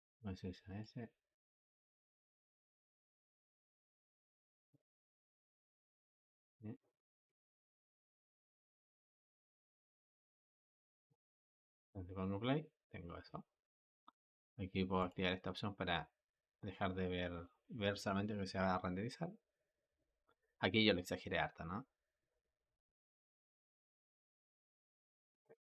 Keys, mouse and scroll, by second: 0.7 click, 5.7 click, 7.4-10.5 drag, 11.3 space, 14.8-17.9 drag.